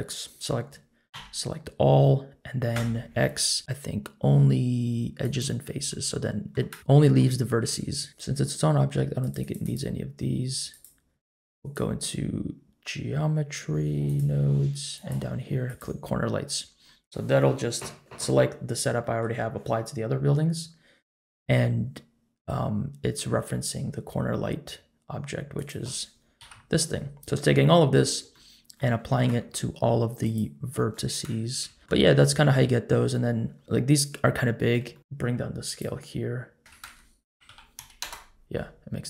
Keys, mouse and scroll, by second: 1.1 a, 2.7 x, 5.9 middle click, 6.8 scroll up 1, 6.9 middle click, 7.3-7.7 scroll up 1, 7.7 Tab, 8.1 click, 9.2 click, 9.4 click, 10.7 click, 11.5-14.2 drag, 14.9 click, 17.4-18.0 scroll down 1, 18.2-19.0 scroll down 1, 19.0 middle click, 20.1-20.6 scroll down 1, 25.5 click, 26.4 KP_Decimal, 27.1-27.7 scroll down 1, 27.7-28.2 scroll down 2, 28.2 scroll down 1, 28.3 shift+middle click, 30.2 click, 30.2 scroll up 1, 31.2 KP_Enter, 31.7 KP_Decimal, 31.8 ctrl+z, 31.8 middle click, 31.8-33.1 scroll up 3, 34.8 scroll up 1, 34.9 shift+middle click, 35.0-35.6 scroll down 3, 35.6-38.1 drag, 38.9-39.0 scroll up 2.